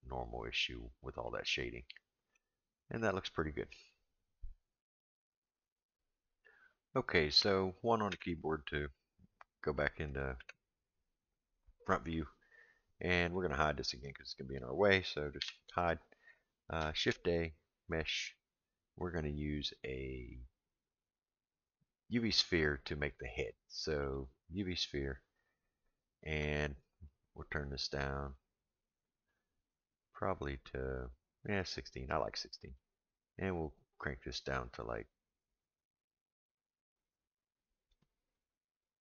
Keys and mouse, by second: 1.2-2.3 middle drag, 2.9 middle click, 10.1 click, 10.4 KP_1, 15.4 h, 16.9 shift+a, 27.1-32.0 drag, 32.8-38.0 drag.